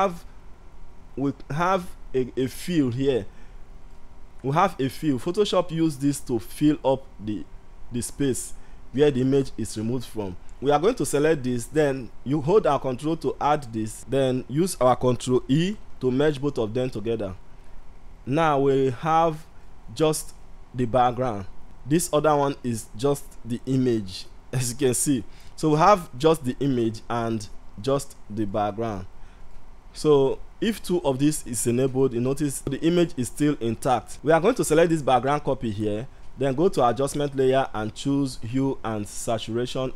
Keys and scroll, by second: 15.1 ctrl+e.